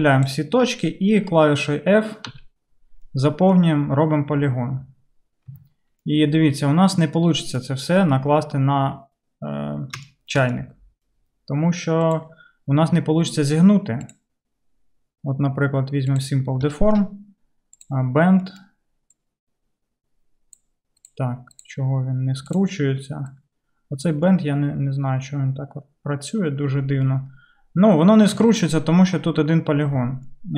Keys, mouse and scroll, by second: 0.0-18.5 drag, 2.3 f, 5.5 Tab, 17.9-20.1 middle drag, 19.2-21.5 drag, 21.2-23.4 middle drag, 22.7-30.5 drag, 28.4 Tab, 30.0 Tab.